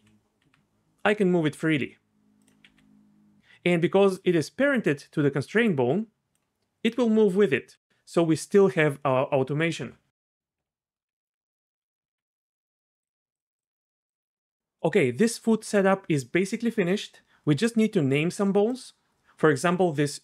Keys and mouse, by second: 0.0 e, 0.4 r, 2.7 r, 3.4 d, 3.8-6.9 d, 4.2 click, 11.1 d, 11.8 a, 13.1-14.1 drag, 18.7 click.